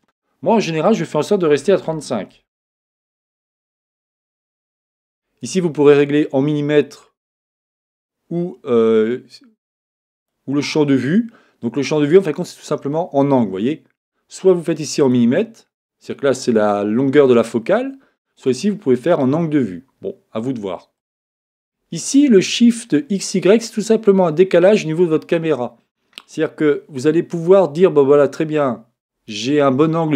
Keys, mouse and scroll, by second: 0.0-1.3 drag, 7.2-9.1 drag, 15.3 click, 18.4-20.2 drag, 21.0-22.8 drag, 25.3-27.2 drag.